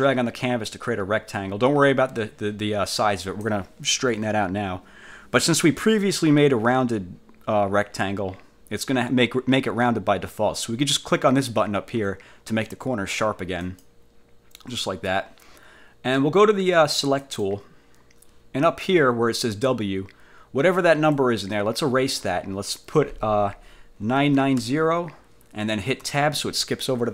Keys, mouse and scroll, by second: 13.7 click, 17.3 click, 21.2-22.5 drag, 24.3 9, 24.7 0.